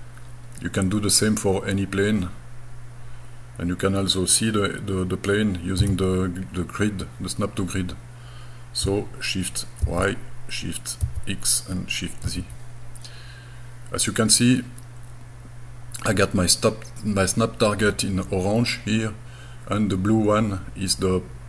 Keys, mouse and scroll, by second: 5.8 g, 9.8 shift+y, 11.0 shift+x, 12.3 shift+z, 14.4-15.3 scroll up 2, 17.7-18.7 middle drag.